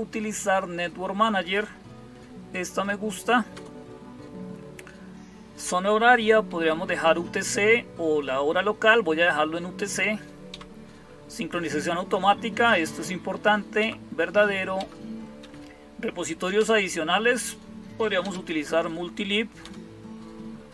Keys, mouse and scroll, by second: 3.3 Return, 6.3 Down, 6.5 Down, 6.8 Up, 7.0 Up, 10.3 Down, 13.6 Down, 14.6 Down, 15.2 Up, 16.4 Return, 18.0 space, 19.5 Return.